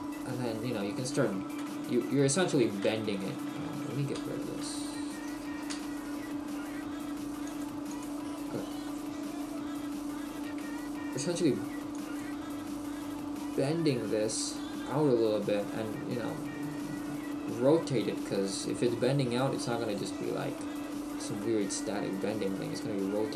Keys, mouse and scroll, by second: 1.6 KP_3, 3.0 shift+middle click, 4.9 t, 7.5 click, 8.9 click, 8.9 shift+middle click, 9.6 scroll up 2, 10.5 a, 13.7 click, 18.6 click, 19.4 shift+middle click.